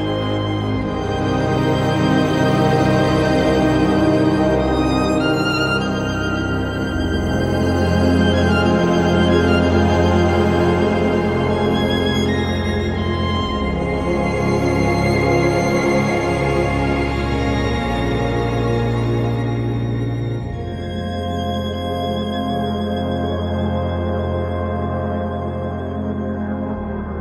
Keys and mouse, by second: 0.6 j, 3.3 j, 4.8 shift+click, 5.7 j, 7.4 click, 7.9 shift+click, 9.4 j, 9.4 2, 9.7 click, 9.8-10.8 right drag, 11.0 1, 13.0 j, 15.2 j, 17.0 j, 17.8 click, 19.2 j, 20.1 shift+click, 21.0 j, 21.4 click, 22.8 j, 23.4 click, 24.7 j, 26.5 j.